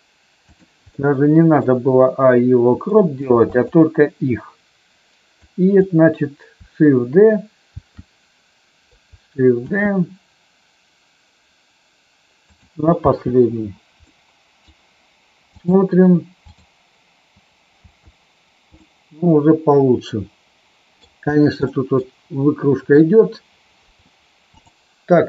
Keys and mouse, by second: 0.3 click, 1.1 middle click, 3.0 middle click, 3.3 shift+click, 5.3-5.7 drag, 7.7 shift+g, 9.6 shift+d, 12.5 click, 13.0 space, 14.0-14.6 middle drag, 15.5 click, 16.5 click, 17.7 space, 18.7-21.0 middle drag, 21.7 middle click, 24.5 click.